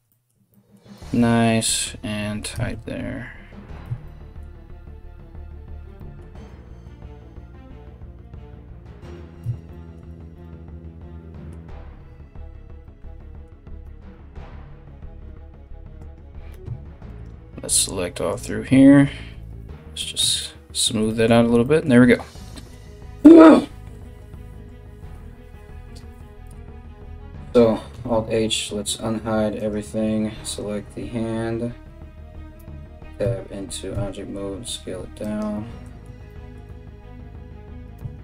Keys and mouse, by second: 2.1 Tab, 3.4 Tab, 8.6 alt+q, 9.0 Tab, 13.4 Tab, 15.6 right click, 16.7 ctrl+right click, 17.3 ctrl+right click, 17.5 ctrl+middle click, 17.9 ctrl+right click, 18.2-38.2 ctrl+middle drag, 18.9 alt+q, 19.1 alt+q, 19.8 Tab, 22.2 KP_1, 27.5 alt+h, 29.2 right click, 32.2 Tab, 32.8 a, 33.5 s, 37.5 Tab.